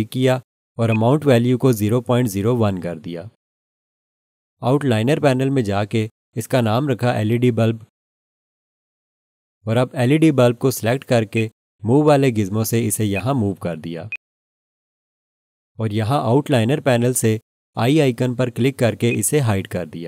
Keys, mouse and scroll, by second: 0.9 click, 1.5-3.1 typing, 3.4 Return, 7.0 F2, 7.3-10.6 typing, 11.3 click, 19.1 click.